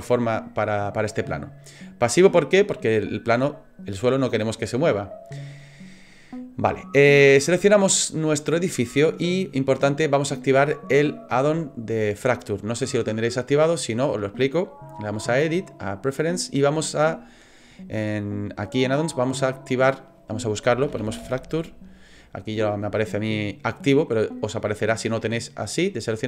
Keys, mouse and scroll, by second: 7.2 right click, 14.1 click.